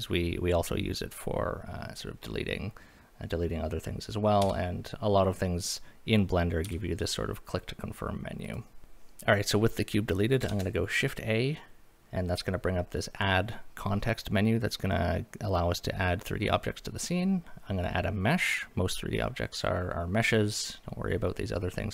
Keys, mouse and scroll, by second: 4.4 x, 6.6 x, 8.8 click, 8.8 scroll down 1, 10.5 shift+a.